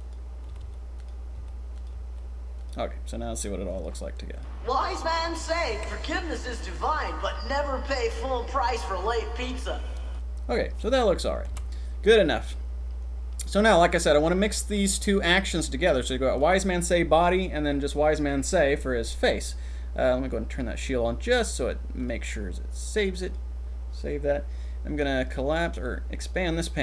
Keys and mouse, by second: 0.0 click, 0.5-2.0 typing, 3.7 click, 4.3 click, 10.0 click, 11.5 ctrl+s, 14.7 click, 20.5 click, 22.1-23.5 drag, 25.1 click.